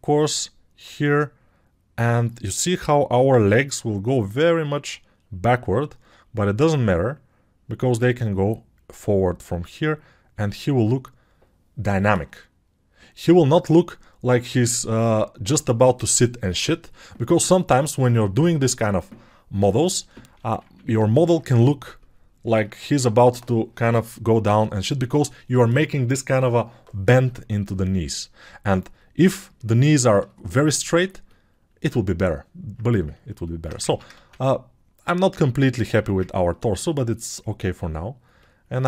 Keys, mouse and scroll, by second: 33.8 ctrl+Tab, 34.2 shift+a, 35.9 Tab.